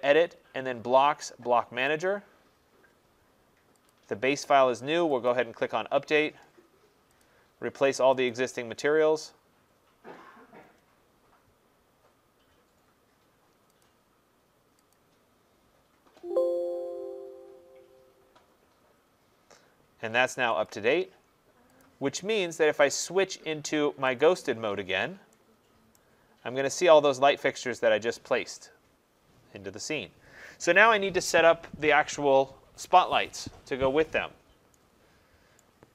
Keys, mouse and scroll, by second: 2.0 click, 3.9 click, 5.3 click, 7.2 click, 13.8 click, 14.9 click, 20.7 click, 21.8 click, 22.9 click, 26.0 right click, 26.4 middle click, 26.5 middle click, 26.6 middle click, 26.7 middle click, 26.8 middle click, 27.1 middle click, 27.2 middle click, 35.6 right click.